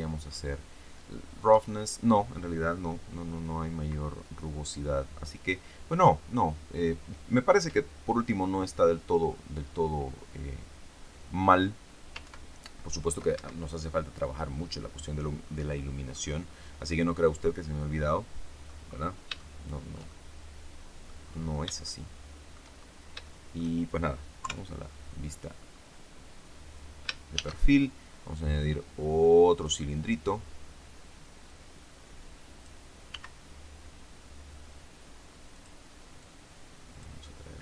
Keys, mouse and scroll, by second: 12.1 ctrl+Right, 13.2 ctrl+Escape, 15.3-15.6 scroll down 2, 15.6 click, 16.2-16.6 scroll down 2, 16.7-18.8 drag, 18.8-19.1 scroll up 2, 19.2 shift+middle click, 19.3 shift+scroll up 1, 20.0-21.2 shift+middle drag, 21.8 shift+middle click, 22.6 shift+scroll up 1, 23.1 shift+middle click, 24.3 KP_3, 25.0 scroll up 2, 25.4-26.0 scroll down 2, 27.2 shift+a, 29.4 click, 31.4-32.8 drag, 33.0 s, 35.4 click, 36.1-37.1 drag.